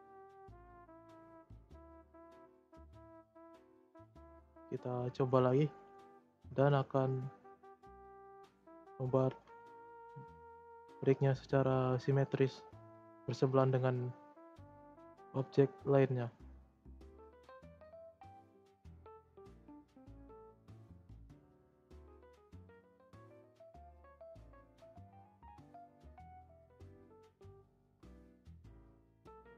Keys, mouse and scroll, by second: 1.4-2.8 middle drag, 2.8 alt+z, 3.2 middle click, 3.7 click, 4.1-5.7 shift+middle drag, 5.7 click, 6.0-6.4 middle drag, 6.4 Tab, 7.5 scroll down 1, 7.6-9.4 middle drag, 9.4-10.0 scroll up 2, 10.0-15.2 middle drag, 15.2 scroll down 2, 15.4 middle click, 16.1 scroll up 1, 16.3 middle click, 17.1-17.5 shift+scroll up 2, 17.5 click, 18.2 middle click, 18.8 r, 20.7-22.3 drag, 22.6 click, 23.8 click, 24.2-25.2 middle drag, 25.2-25.8 scroll down 3, 25.2 middle drag, 25.8 r.